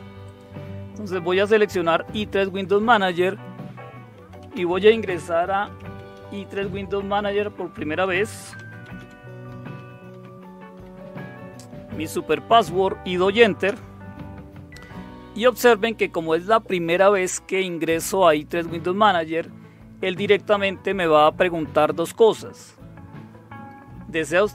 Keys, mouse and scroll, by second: 0.2 click, 2.6 click, 3.9-11.2 typing, 7.1 Tab, 13.6 Return.